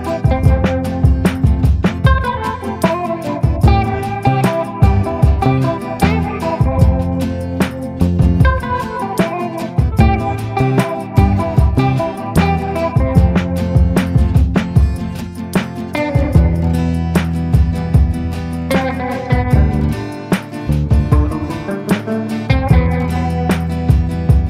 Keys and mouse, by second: 0.8 middle click, 1.9 middle click, 2.8 middle click, 4.8 shift+middle click, 5.7 shift+middle click, 8.6 ctrl+i, 9.2 b, 10.3 b, 11.9 b, 12.7 b, 13.5 middle click, 14.2 shift+middle click, 14.6 b, 15.4 b, 16.1 b, 16.8 b, 17.5 middle click, 17.8 b, 18.8 shift+middle click, 20.1 b, 21.2 b, 21.8 b, 22.9 b, 23.7 b.